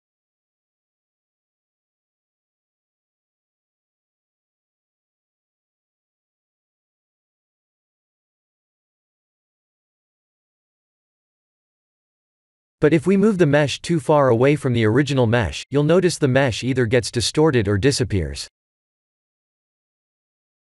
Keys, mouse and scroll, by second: 1.2-2.1 middle click, 2.0 middle click, 2.2 middle click, 3.1 middle click, 3.8 click, 4.3 x, 5.0 click, 6.4 click, 7.6 shift+d, 10.7 ctrl+z, 11.6 middle click, 13.8 click, 14.3 shift+d, 16.2 s, 18.1 middle click, 19.4 shift+d.